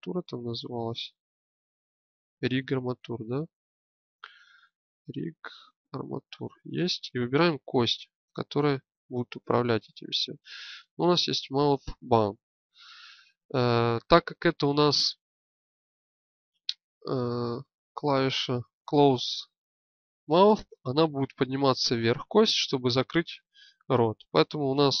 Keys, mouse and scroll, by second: 6.6-10.8 drag, 16.5-18.8 drag.